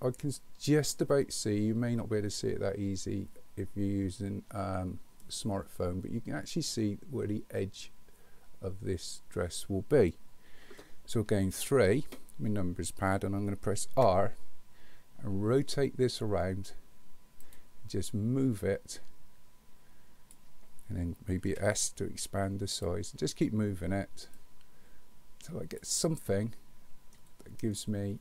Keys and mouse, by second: 11.6 KP_3, 13.9 r, 18.6-20.3 drag, 21.5 s, 24.4-25.8 drag, 26.3-27.1 middle drag.